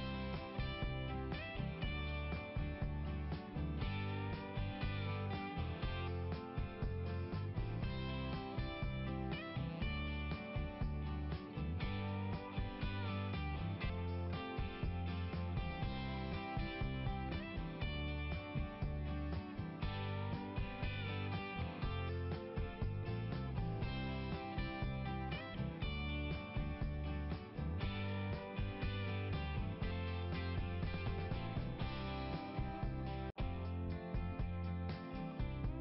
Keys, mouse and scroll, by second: 0.0 scroll up 1, 0.2 scroll down 1, 0.4-1.4 scroll up 1, 3.7 scroll down 2, 4.0 scroll up 1, 4.1-5.7 scroll down 1, 5.7 scroll up 1, 6.1 click, 9.4 scroll up 2, 9.7 scroll down 1, 9.8-10.5 scroll up 1, 11.4 click, 13.8 click, 17.2 click, 19.1 click, 22.2 click, 22.5 click, 24.5 click, 26.9 click, 29.0 click, 32.6 click, 32.9 click.